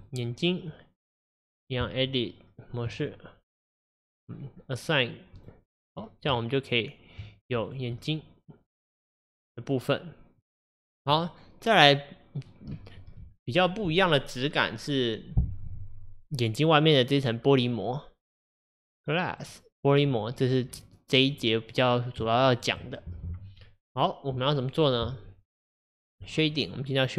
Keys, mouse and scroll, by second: 0.1 click, 2.9 Tab, 5.5-7.2 drag, 7.2 Tab, 7.8 click, 8.1-10.8 middle drag, 10.8-11.2 scroll down 1, 11.2-19.5 middle drag, 19.5 click, 20.5 click, 21.4-26.3 middle drag, 26.3 click.